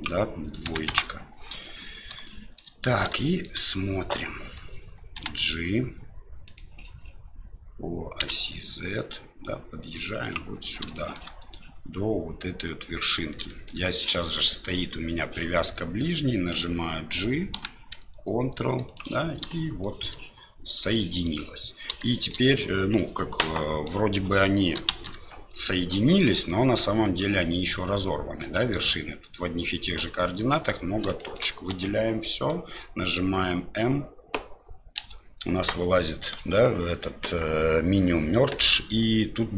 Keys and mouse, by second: 2.3 shift+middle click, 3.3 shift+middle click, 5.1 g, 11.0 shift+middle click, 13.6 shift+middle click, 17.5 g, 21.0 shift+middle click, 22.2 shift+middle click, 23.1 middle click, 24.5 middle click, 24.9 shift+z, 25.7 middle click, 26.6 middle click, 28.7 middle click, 29.9 middle click, 31.3 shift+middle click, 31.7 a, 32.2 middle click, 35.0 m.